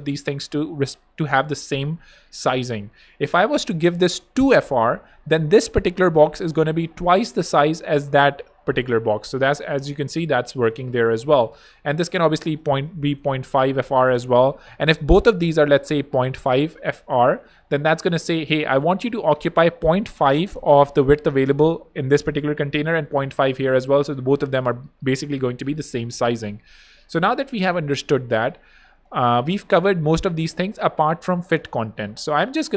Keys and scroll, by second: 4.5-5.4 typing, 12.8-14.4 typing, 16.2-17.9 typing, 26.6 BackSpace, 32.4-32.7 typing.